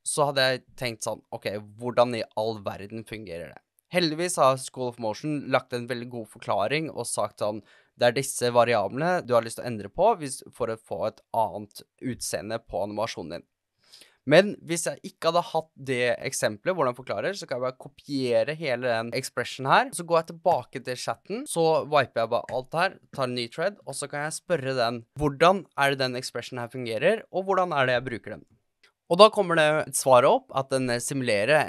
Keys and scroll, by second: 21.1 super+c, 24.9-28.5 typing, 28.5 shift+Return, 28.6 shift+Return, 28.8 super+v.